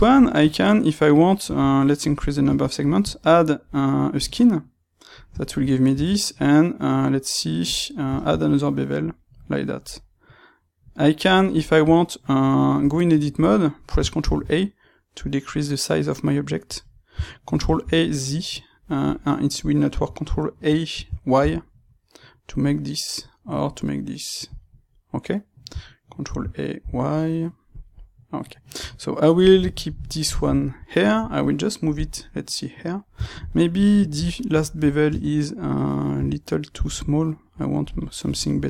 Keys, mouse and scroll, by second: 5.3 shift+middle click, 8.1 shift+middle click, 9.8 middle click, 14.2 ctrl+a, 16.8 click, 17.4 ctrl+a, 19.1 click, 20.9 ctrl+a, 24.5 click, 26.2 ctrl+a, 27.8 click, 29.6-37.9 ctrl+middle drag, 35.0 space, 37.9 click, 38.2-38.6 ctrl+middle drag.